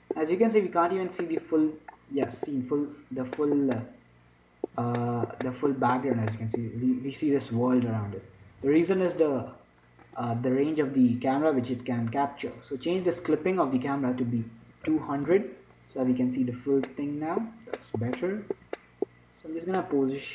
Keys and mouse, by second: 9.0-10.8 right drag, 10.4-12.3 drag, 14.0-15.8 drag, 15.3 0, 18.5-20.3 middle drag.